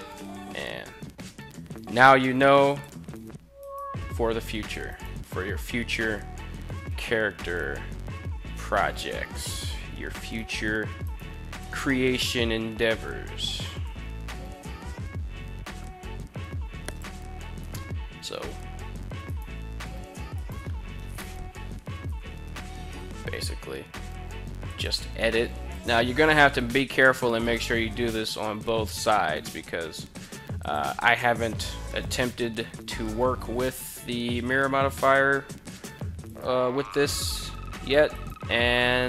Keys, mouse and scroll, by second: 2.2 click, 3.0 right click, 4.4 shift+right click, 6.2 s, 6.5 x, 8.9 click, 9.7 right click, 10.5 right click, 11.1 right click, 12.0 g, 13.4 z, 16.4 click, 17.1 right click, 18.7 shift+right click, 19.8 shift+right click, 21.5 g, 21.9 z, 24.2 click, 25.2 right click, 26.0 right click, 26.9 shift+right click, 27.6 g, 28.0 z, 30.1 click, 31.5 s, 31.8 x, 35.2 click, 35.8 right click, 36.4 shift+right click, 37.8 right click.